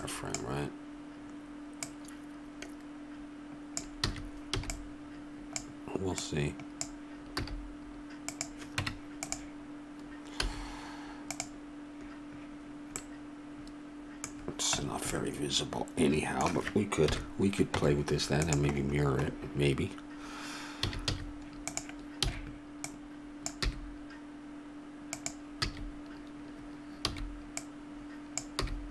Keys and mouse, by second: 1.9-3.7 drag, 4.1 a, 4.6 b, 6.2-7.3 drag, 7.4 g, 8.8 Tab, 10.4 z, 13.0-16.8 middle drag, 17.1 KP_1, 17.8 Tab, 21.1 a, 21.1 z, 22.3 b, 23.6 g, 25.7 a, 27.2 b, 28.6 g.